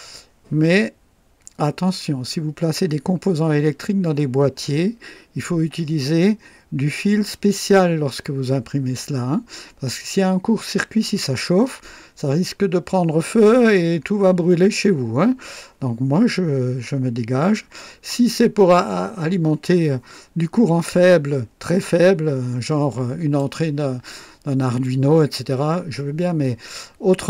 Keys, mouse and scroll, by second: 17.5-18.3 drag, 22.8-23.5 drag, 24.8-25.5 drag.